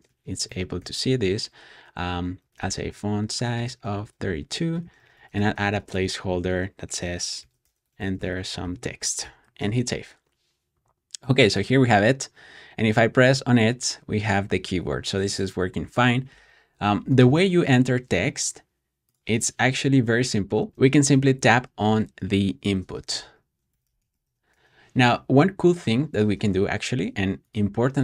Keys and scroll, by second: 0.0-9.6 typing, 19.3 Escape, 20.7-21.3 typing, 22.5-24.5 typing.